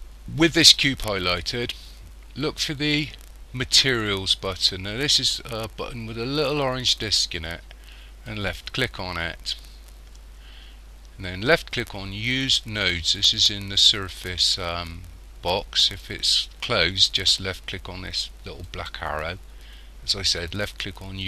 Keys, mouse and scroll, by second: 8.3 click, 15.9 click, 18.7 click.